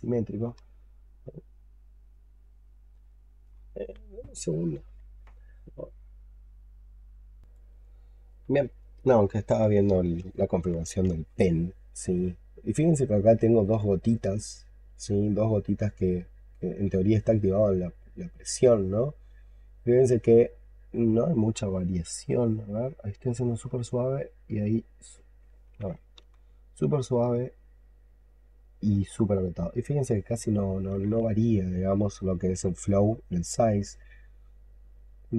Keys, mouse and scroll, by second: 0.2 double click, 0.4 double click, 0.7 double click, 0.8 double click, 1.3 double click, 1.7 double click, 2.0 double click, 2.3 double click, 2.5 double click, 2.7 double click, 3.0 double click, 7.4 double click, 26.1 x.